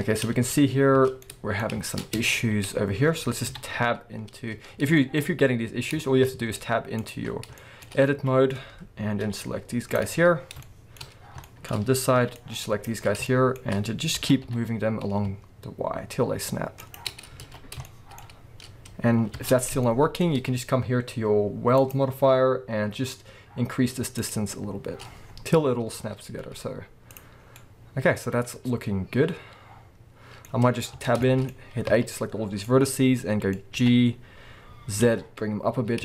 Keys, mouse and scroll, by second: 0.3 Tab, 1.1 scroll down 2, 2.0 scroll up 1, 2.2 Tab, 3.5 KP_7, 4.1-4.7 scroll down 1, 4.7-6.0 scroll up 3, 6.4 z, 7.2-7.6 scroll up 2, 7.9 scroll up 2, 8.1 alt+a, 9.2 b, 10.1-10.6 scroll down 2, 11.0-11.4 scroll up 2, 11.8-12.1 scroll up 2, 12.1 b, 13.0 scroll down 2, 14.2 g, 16.9 shift+click, 17.4 alt+a, 17.8-21.8 shift+middle drag, 18.2-19.4 scroll up 2, 19.4 Tab, 19.5 scroll down 2, 21.8 click, 24.1-27.6 drag, 25.2-26.3 scroll down 1, 26.3 z, 27.3 scroll down 2, 27.6-36.0 middle drag, 30.4-31.0 scroll up 2, 31.0 Tab, 31.9 a, 32.2-32.6 scroll up 2, 33.8 g.